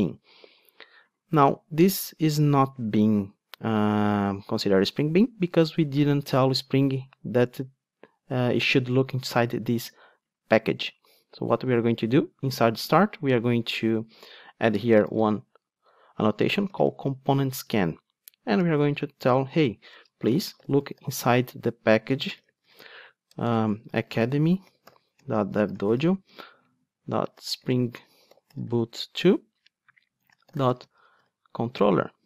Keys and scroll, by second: 17.3 Return.